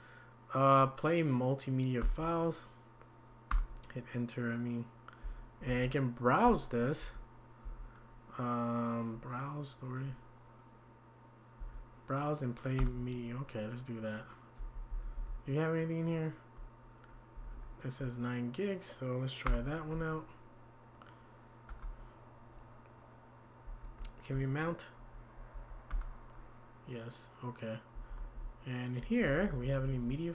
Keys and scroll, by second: 2.0 \, 7.0 Down, 7.6 Up, 11.6 Down, 14.9 Down, 15.1 Down, 17.3 Up, 17.5 Up, 19.5 Return, 21.7 Return, 23.6 Down, 25.0 Down, 25.5-25.9 typing, 27.9-30.1 typing, 28.2 Down.